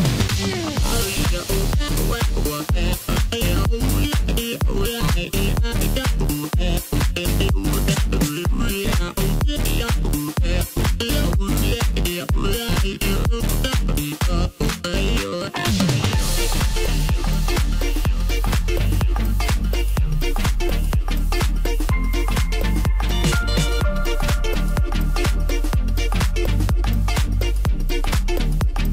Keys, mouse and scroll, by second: 0.2 e, 1.6-2.8 middle drag, 2.8 click, 3.2 middle click, 4.1 l, 4.8 KP_1, 5.6-6.8 scroll up 1, 6.8 s, 10.8-13.3 middle drag, 13.3 s, 14.8 KP_7, 15.7-16.6 scroll down 2, 16.6 ctrl+KP_4, 17.8 g, 20.5-23.6 middle drag, 23.9 KP_1, 24.6 click, 25.1-26.3 scroll up 1, 26.3 shift+d, 27.7 s.